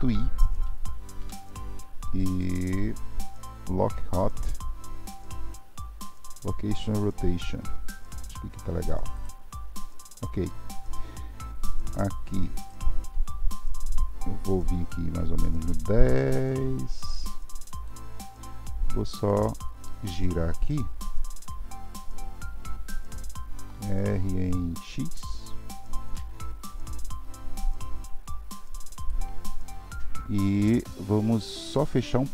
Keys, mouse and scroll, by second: 12.6 click, 14.9-18.7 drag, 18.7-21.3 middle drag, 21.3 r, 31.0 scroll up 1, 31.1-32.3 middle drag.